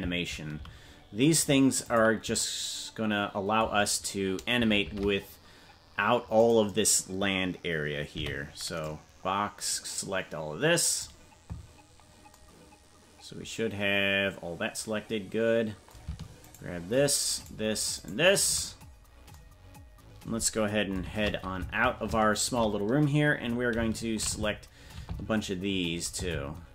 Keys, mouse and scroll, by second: 4.8 shift+`, 8.1 b, 17.0-19.3 shift+right drag, 21.0 shift+`, 24.7 shift+`.